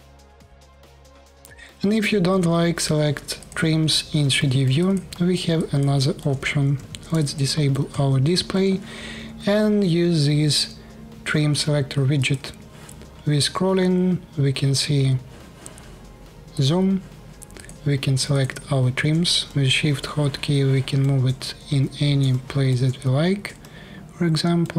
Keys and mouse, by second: 0.0 middle click, 0.2-0.6 alt+drag, 0.4 alt+middle click, 0.6 alt+middle click, 0.7-2.6 alt+drag, 2.1 f, 2.6 middle click, 3.6 click, 3.7 middle click, 3.9-12.0 alt+drag, 6.5 d, 12.0-14.3 middle drag, 16.3 click, 17.3 click, 18.0 click, 20.6-24.7 shift+middle drag.